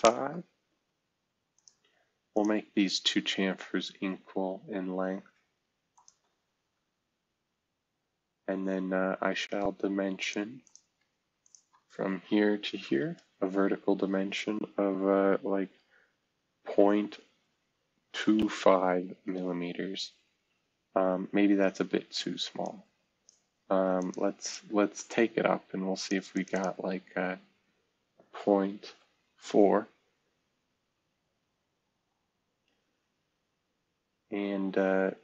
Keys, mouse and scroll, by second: 0.0 Return, 0.7 Escape, 1.5-2.7 drag, 2.7-3.6 scroll down 1, 3.6-5.3 scroll up 1, 6.6 typing, 10.2 click, 10.6 click, 12.8 shift+v, 16.7 typing, 18.1 typing, 19.1 Return, 29.0 typing, 29.5 Return, 31.0 scroll down 1, 31.6 scroll down 1, 32.5-33.2 scroll up 1, 33.3-33.8 scroll up 1, 33.8 typing.